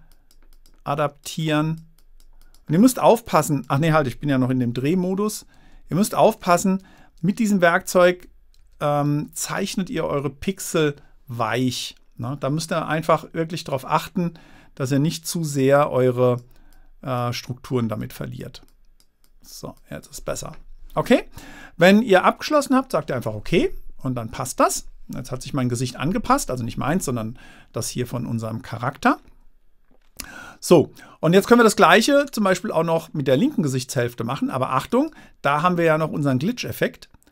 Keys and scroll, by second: 6.0 super+z, 7.2 super+z, 8.1 super+z, 9.0 super+z.